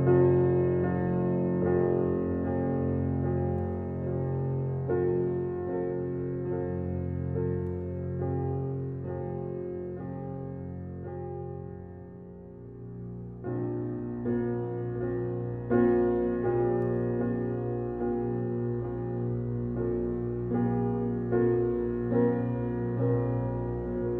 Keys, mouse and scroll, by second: 1.6 shift+d, 3.1-3.6 shift+middle drag, 3.6 shift+d, 4.6 g, 5.5-7.1 middle drag, 7.3 g, 8.7 scroll down 3, 9.3 shift+d, 10.8 click, 11.5 middle click, 12.1 click, 13.0-14.2 scroll down 2, 14.2 click, 15.3 click, 15.7 click, 16.0 click, 16.5 click, 17.3 click, 21.2 click, 21.8 alt+middle click, 22.2 scroll up 3, 22.5 shift+middle click, 22.9 click, 23.7 scroll down 2, 24.0-24.1 middle drag.